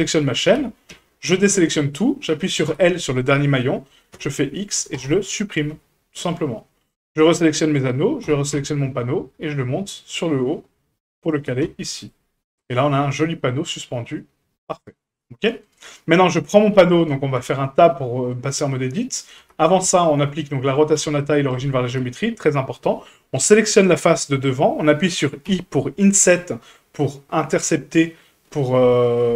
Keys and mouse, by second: 0.9 a, 2.7 l, 4.1 x, 5.7 Tab, 6.9 click, 7.5 shift+click, 8.2 g, 11.6 a, 12.3 middle drag, 13.4-15.1 middle drag, 15.6 right click, 15.9 middle drag, 16.7 KP_Decimal, 17.4 Tab, 17.8 middle click, 19.4 Tab, 19.8 q, 20.9 q, 22.0 Tab, 23.3 click.